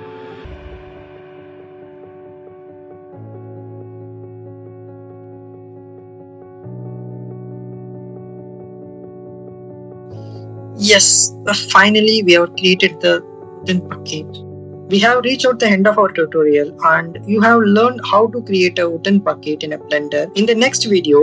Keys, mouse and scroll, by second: 0.3 click, 0.8 click, 1.9-4.5 drag, 5.0 shift+middle click, 6.0 middle click, 6.7 click, 7.1 middle click, 7.6 click, 8.0 middle click, 8.8 middle click, 9.8 shift+middle click, 10.7-15.8 middle drag, 16.9-18.5 middle drag.